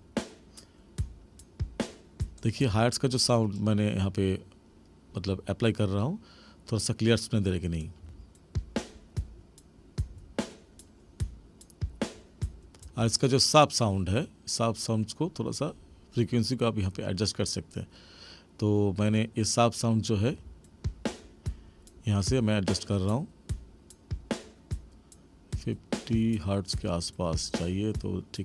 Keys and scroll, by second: 2.5 space, 8.0 space, 12.8 space, 20.3 space.